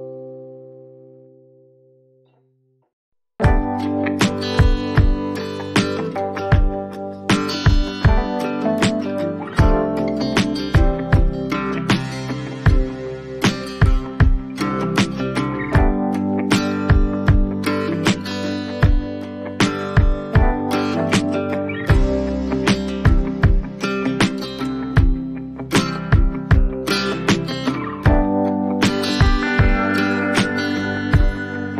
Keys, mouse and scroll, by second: 0.0-0.3 typing, 0.7 right click, 3.0 click, 4.5 click, 4.8 alt+scroll, 7.0 click, 8.0 click, 10.3 click, 11.0 click, 11.1 click, 11.3 click, 11.8 click, 12.7 click, 14.3 click, 16.0 click, 16.2 x, 17.3 click, 17.7 x, 19.0 click, 20.8 ctrl+0, 21.0-24.1 drag.